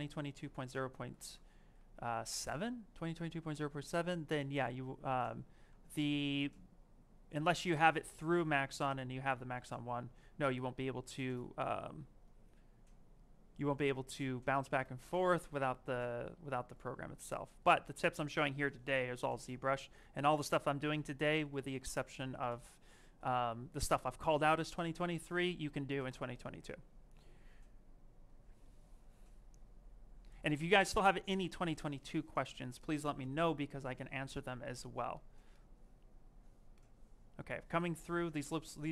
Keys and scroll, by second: 8.6 shift+f.